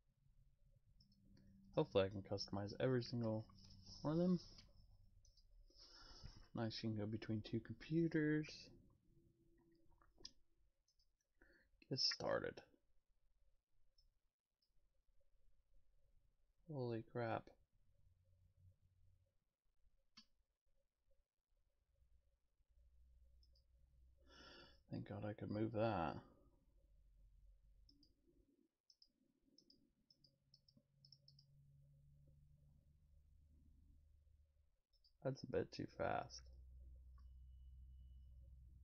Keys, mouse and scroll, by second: 1.0 right click, 10.9 click, 14.5 click, 27.9 click, 28.9 click, 29.6 click, 30.1 click, 30.5 click, 31.0 click, 31.3 click, 34.9 click.